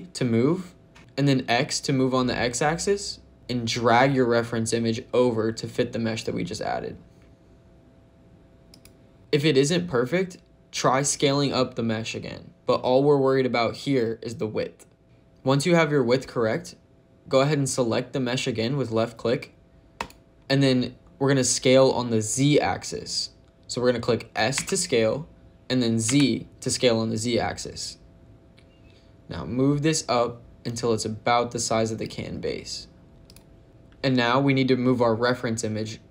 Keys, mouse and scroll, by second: 1.0 x, 8.6 click, 9.2 click, 19.9 click, 24.5 s, 26.0 z, 33.2 click.